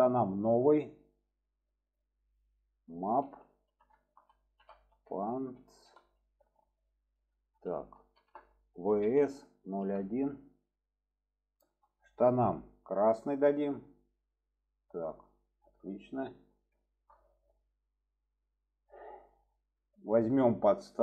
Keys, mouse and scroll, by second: 0.2 click, 1.8-11.9 drag, 13.0 click, 15.8-16.4 middle drag, 16.8 shift+middle drag, 17.3 click, 17.9-18.5 middle drag, 19.3 click, 19.9 shift+middle click, 20.7 shift+middle click.